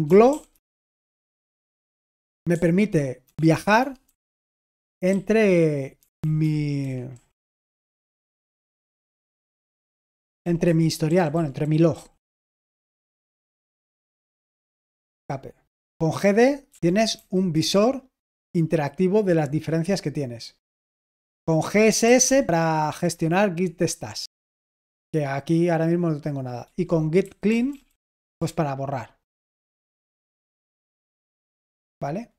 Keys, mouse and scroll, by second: 0.0-0.9 typing, 2.4 j, 3.7 Down, 3.9 Down, 4.4 Down, 5.0 Up, 5.9 Down, 6.1 Down, 6.3 Down, 6.7 Down, 7.0 Up, 7.3 Up, 7.7 typing, 8.4 Up, 8.8 Down, 9.0 typing, 9.0 Down, 9.5 Down, 9.7 Down, 9.9 Down, 10.1 Down, 10.3-11.8 typing, 10.3 Down, 10.5 Down, 11.0 Up, 11.2 Up, 12.9 typing, 14.9 Escape, 16.6-17.7 typing, 17.5 Return, 20.9 Escape, 21.5-22.6 typing, 23.0 Return, 26.6-28.5 typing, 31.2 Escape.